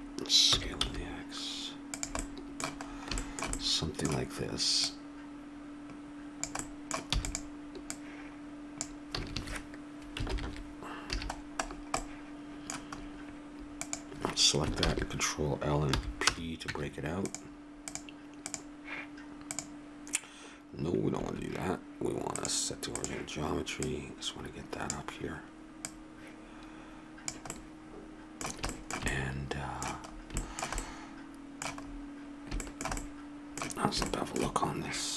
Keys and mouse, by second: 0.4 s, 2.2-4.8 middle drag, 4.8-6.3 right drag, 6.6 click, 7.1 e, 7.9 click, 9.2 a, 9.3 a, 10.3 ctrl+n, 11.1 a, 14.8 ctrl+l, 15.9 p, 16.7 Tab, 17.8-19.5 drag, 21.1-22.9 drag, 27.5-29.4 middle drag, 34.1-35.1 middle drag.